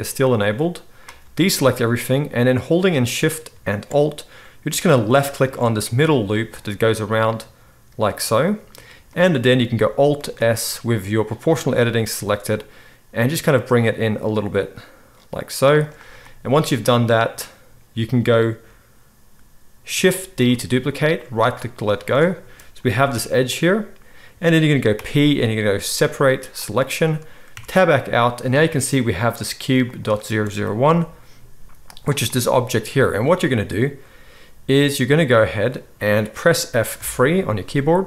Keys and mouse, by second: 1.4 alt+a, 5.3 alt+shift+middle click, 5.5-6.8 shift+right drag, 6.8-13.2 middle drag, 10.2 alt+s, 13.2-21.5 right drag, 20.4 shift+d, 21.5-23.0 middle drag, 21.8 z, 22.9 g, 24.9 p, 27.5 Tab, 29.9 click, 30.8 g, 37.0 F3.